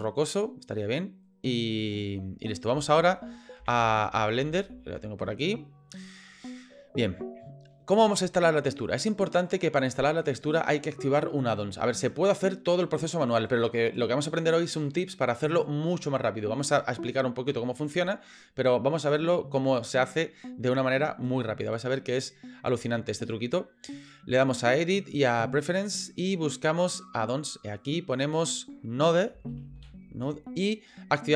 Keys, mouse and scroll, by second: 24.6-25.6 drag.